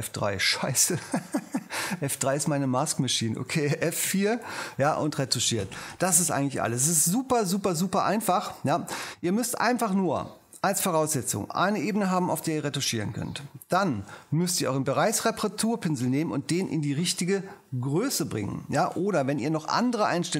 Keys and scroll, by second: 4.0 F4, 15.0 j, 15.6 ctrl+alt+j.